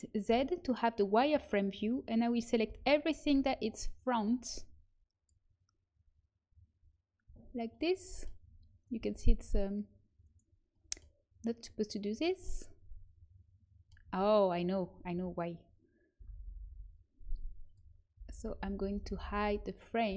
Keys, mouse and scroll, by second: 0.4 z, 2.6 n, 3.3 b, 7.2 z, 8.9 g, 14.0 a, 16.1-16.4 l, 16.6-19.3 l, 17.6-18.9 drag, 19.4-20.1 l.